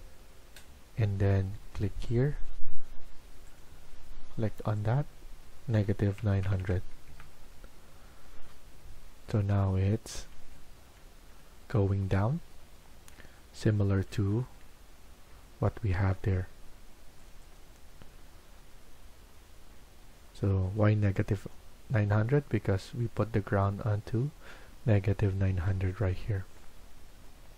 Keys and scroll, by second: 5.5-6.9 typing, 7.1 Return, 7.8 Escape.